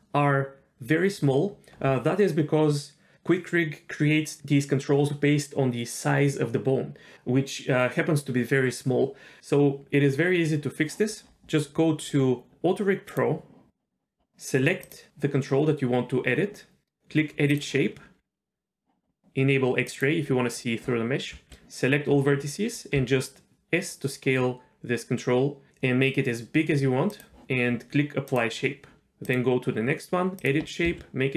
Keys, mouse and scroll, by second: 9.4-9.7 scroll down 1, 11.2-11.9 scroll up 3, 12.1-12.9 scroll up 1, 12.9 scroll up 1, 13.1 click, 14.8 click, 17.5 click, 19.9 click, 21.3 a, 23.0 s, 28.3 click, 29.2 click, 30.4 click, 30.8 s.